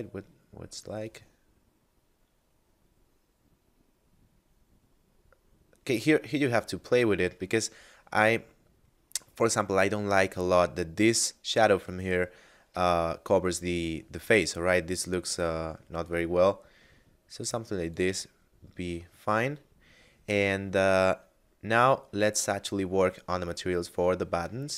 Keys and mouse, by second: 6.8 click, 12.7 r, 12.9 z, 17.9 click, 18.9 middle click, 22.3 middle click.